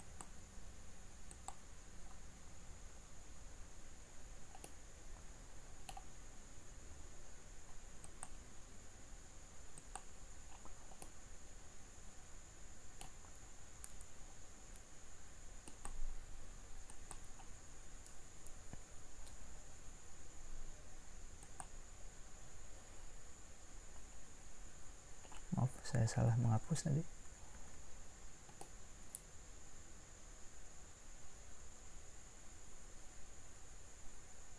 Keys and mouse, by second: 2.6 click, 6.5-9.8 middle drag, 26.4 ctrl+z, 27.6 ctrl+z, 28.7 middle click.